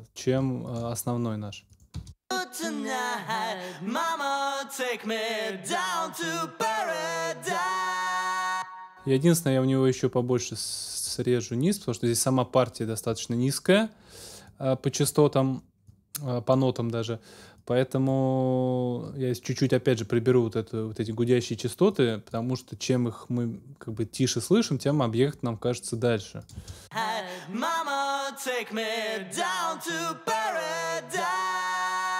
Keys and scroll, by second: 1.9 space, 8.3 space, 26.5 space.